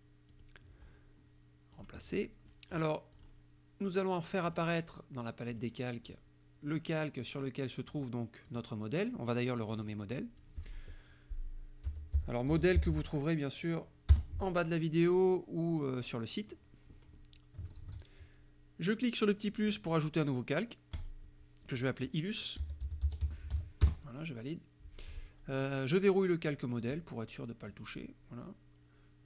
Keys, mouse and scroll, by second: 0.4 click, 1.8 click, 3.2 click, 4.5 click, 5.5 click, 7.9 click, 8.5 click, 9.8 click, 10.5 click, 11.7-13.5 typing, 14.2 Return, 16.1-16.7 drag, 17.8 ctrl+s, 21.0 click, 22.4-24.1 typing, 27.8 click.